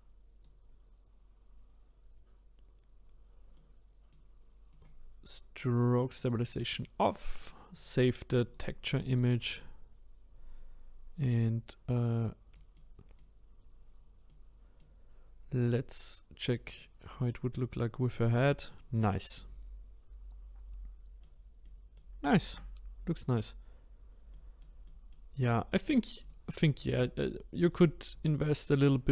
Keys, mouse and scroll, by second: 3.5-4.7 middle drag, 4.7-9.0 drag, 9.0-9.5 scroll down 2, 9.5-11.6 middle drag, 11.6-12.1 scroll up 1, 12.1-13.2 middle drag, 13.2-13.9 scroll up 1, 13.9-14.3 scroll down 2, 14.3 middle click, 15.0-16.7 scroll down 2, 16.7 click, 17.3 middle click, 17.7-18.1 scroll down 1, 18.1-22.6 middle drag, 22.6-23.0 scroll up 1, 23.0-26.2 middle drag, 26.2 click, 27.6 click, 28.1 click, 28.7-29.1 middle drag.